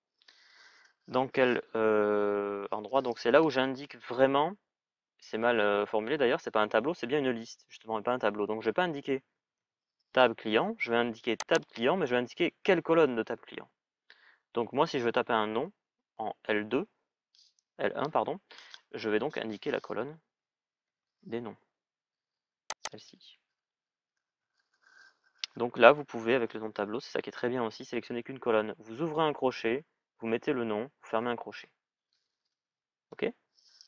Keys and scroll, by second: 20.6 alt+(, 24.1 alt+), 31.9-32.3 typing.